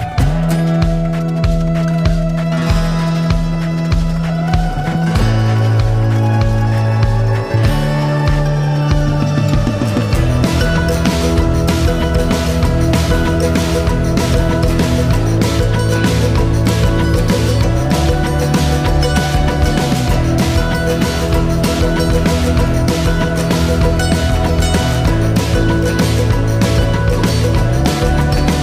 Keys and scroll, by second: 2.6 typing, 3.3 Return.